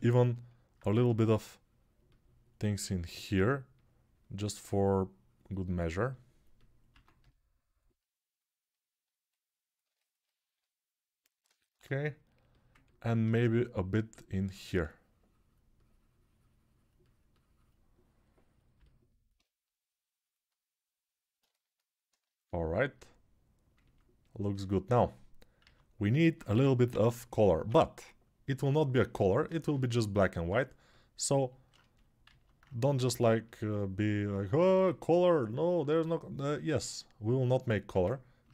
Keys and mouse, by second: 0.7 2, 6.7 1, 25.4 alt+q, 26.3 g, 26.7-27.5 ], 32.7 alt+q, 35.8 alt+q, 38.3 ctrl+Tab.